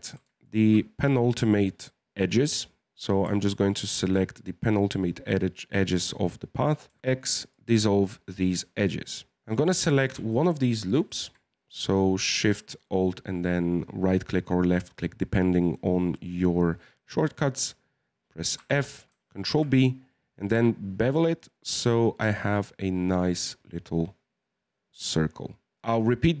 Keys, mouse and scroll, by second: 0.4 alt+shift+right click, 3.8 alt+shift+right click, 7.0 x, 7.8 scroll up 1, 7.9-9.5 middle drag, 9.5 right click, 9.9 alt+shift+right click, 10.3-14.1 middle drag, 18.5 f, 19.4 ctrl+b, 25.7 shift+middle click, 25.9-26.4 scroll up 3.